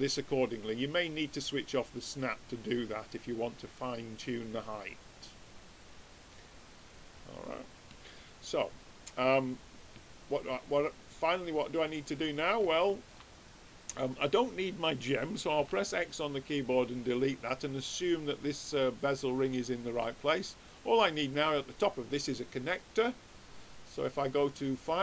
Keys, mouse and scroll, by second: 0.9-3.8 drag, 8.2-10.7 middle drag, 10.7-12.4 drag, 12.7-14.5 middle drag, 14.5-15.7 drag, 15.5 x, 23.5-25.0 drag.